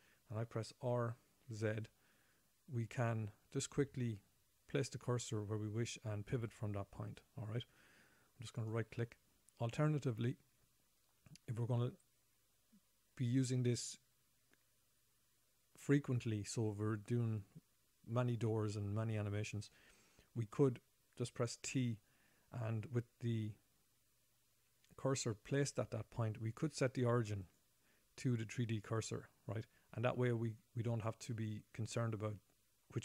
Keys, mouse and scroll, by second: 1.3 r, 22.1 t, 24.5-25.4 scroll up 4, 27.8 click, 29.4 click, 32.5-33.0 scroll down 3.